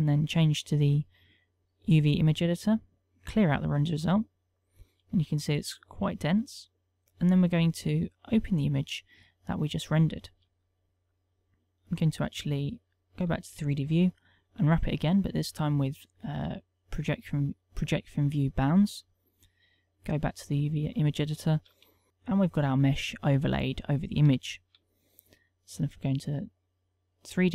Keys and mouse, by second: 1.1 click, 1.5 click, 13.7 shift+middle click, 15.2 u, 19.1 shift+middle click.